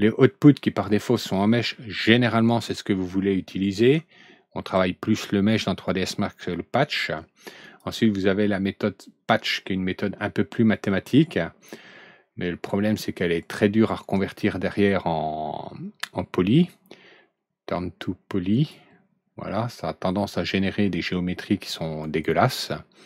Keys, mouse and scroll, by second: 7.6 click, 13.3 click, 14.1-14.5 scroll down 1, 14.7 middle click, 15.1 middle click, 18.5 click, 22.0 right click.